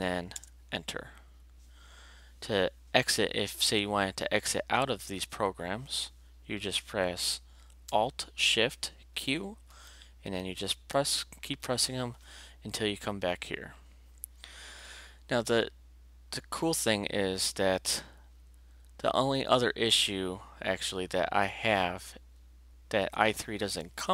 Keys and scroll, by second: 0.3 alt+Return, 9.1 alt+shift+q, 10.9 alt+shift+q.